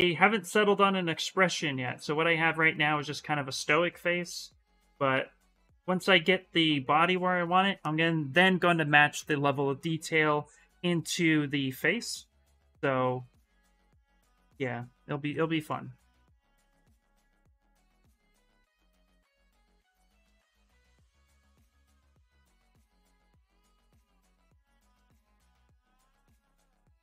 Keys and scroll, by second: 13.4 s, 15.8 s, 16.8 shift+d, 17.0 shift+d, 17.5 s, 18.8-19.7 typing, 25.1-27.0 typing.